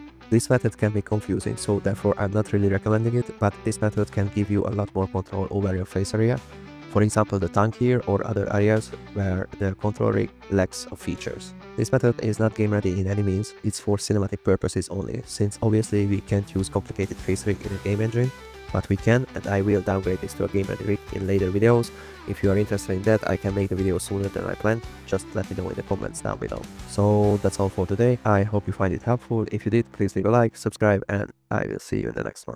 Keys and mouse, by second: 0.1 r, 0.1 z, 0.2 x, 1.0 click, 1.8 click, 1.8 g, 2.2 click, 2.4 g, 2.8 middle click, 3.2 g, 3.6 click, 3.7 g, 3.9 click, 4.6 shift+middle click, 4.7 click, 4.8 g, 5.3 shift+click, 5.4 click, 6.0 drag, 8.2 g, 10.3 drag, 11.0 click, 11.4 click, 11.9 r, 13.2 click, 14.5 click, 15.3 shift+click, 16.2 shift+drag, 18.6 click, 19.4-20.2 drag, 20.5 click, 23.0 drag, 23.5 shift+drag, 24.8-25.3 drag, 25.6 click, 26.6 click, 27.7-28.2 middle drag, 28.0 n, 28.5 middle click, 28.6 middle drag, 28.8 middle drag, 29.0 middle drag.